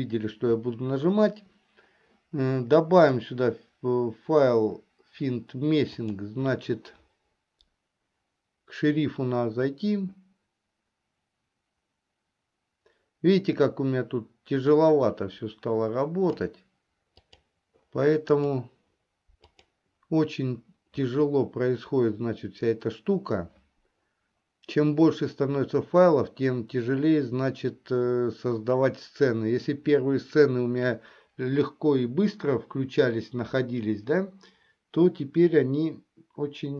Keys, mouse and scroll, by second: 3.1 click.